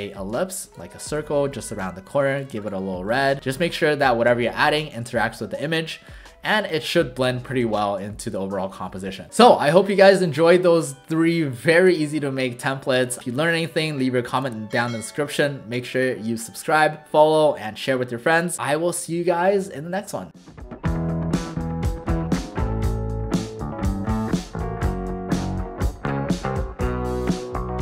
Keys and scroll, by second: 1.2 shift+v, 1.8 i, 2.5 v.